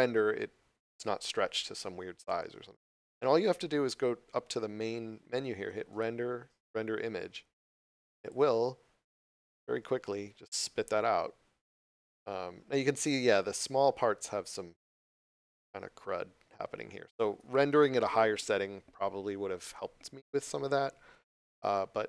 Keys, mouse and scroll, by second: 5.9 click.